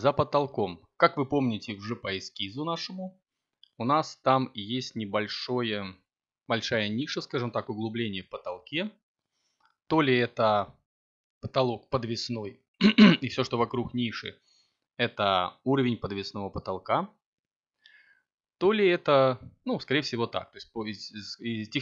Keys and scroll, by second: 13.9 a, 15.5 7, 17.6 z.